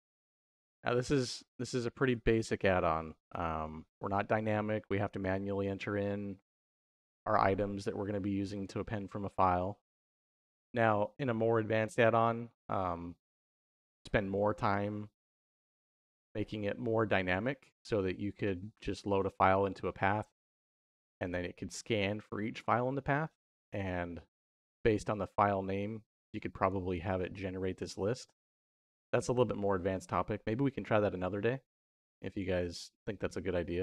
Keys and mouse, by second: 0.6 g, 1.3 middle click, 1.9 g, 4.5 middle click, 5.6 middle click, 7.3 middle click, 8.4 click, 21.1 click, 26.6-27.5 drag, 28.2 click, 28.7-31.0 drag, 32.6 middle click, 33.5 middle click.